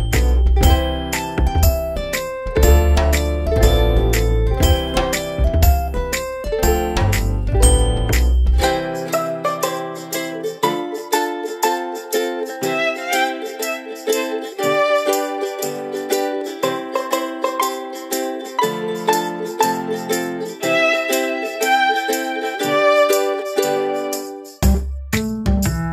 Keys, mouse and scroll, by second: 0.7 click, 11.5 ctrl+0, 12.6 click, 15.5 alt+click, 21.6 alt+click.